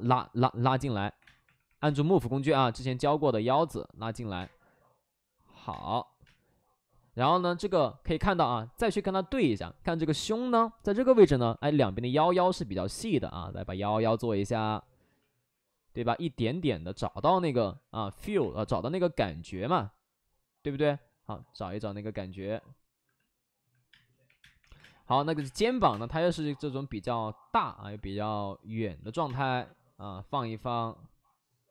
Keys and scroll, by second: 1.1 3, 1.1 space, 1.6 3, 1.7 space, 4.3 space, 5.6 space, 6.2 space, 11.4 3, 18.3 3, 23.8-25.8 typing, 29.2 space.